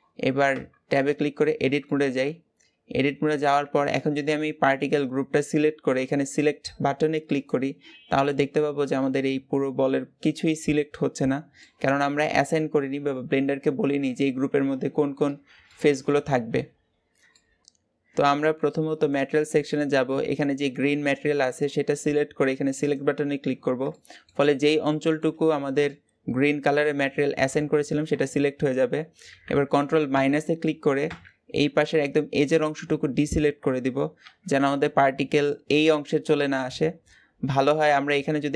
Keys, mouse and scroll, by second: 0.3 Tab, 1.6 shift+middle click, 2.2-2.7 scroll up 1, 2.7 a, 3.4 alt+a, 7.3 click, 7.7-8.2 scroll down 5, 8.2-11.2 middle drag, 15.0-15.5 scroll up 2, 15.5-16.5 middle drag, 16.5-17.1 scroll up 1, 17.1 scroll up 1, 17.2-22.7 shift+middle drag, 22.7-23.8 drag, 23.8 shift+middle click, 24.3-24.6 scroll up 2, 24.6 shift+middle click, 25.3-25.7 scroll up 1, 25.7-27.6 middle drag, 27.6-28.1 scroll up 1, 28.1-29.9 shift+middle drag, 29.9 ctrl+KP_Subtract, 30.8 ctrl+KP_Subtract, 32.6-33.1 scroll up 1.